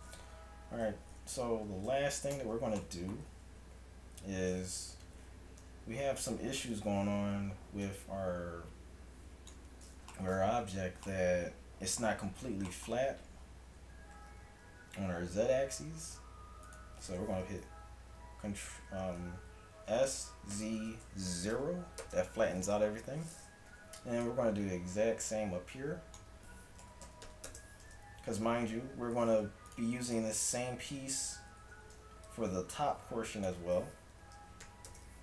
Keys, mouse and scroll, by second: 2.4 shift+Tab, 3.0 middle click, 5.0 Tab, 5.7 KP_3, 6.4 a, 10.5 middle click, 11.1 middle click, 11.3-14.2 middle drag, 14.2 s, 17.2 s, 19.9 s, 22.8 KP_3, 23.8 a, 24.3-26.1 drag, 26.8 s, 28.2 a, 28.6 Tab, 30.5 Tab, 31.2 a, 31.7 a, 34.2 s.